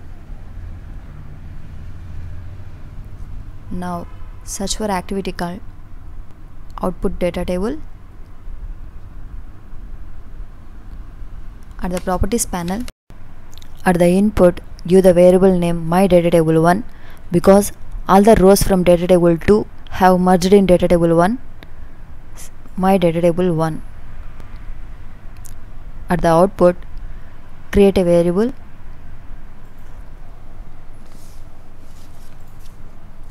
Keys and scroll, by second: 29.9 ctrl+k.